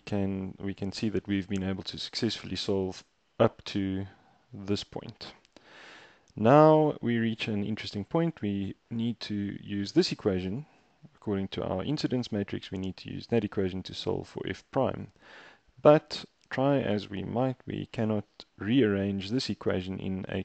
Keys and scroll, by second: 3.0 super+Tab.